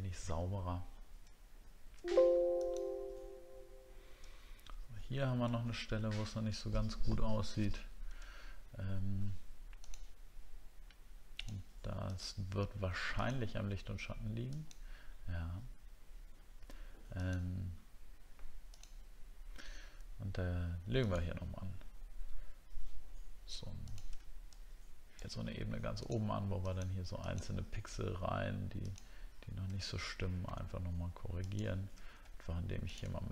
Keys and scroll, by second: 1.3-1.7 alt+scroll down 1, 4.3 alt+scroll up 1, 5.5 alt+scroll up 1, 25.4 alt+scroll up 1, 27.5 alt+scroll up 1.